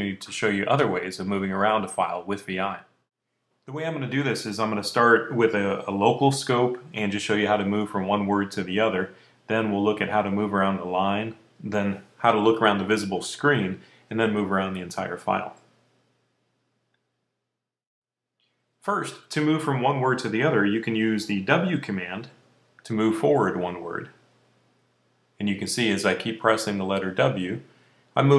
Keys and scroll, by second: 22.8 w, 24.5 w, 25.7 w, 26.8-28.3 typing.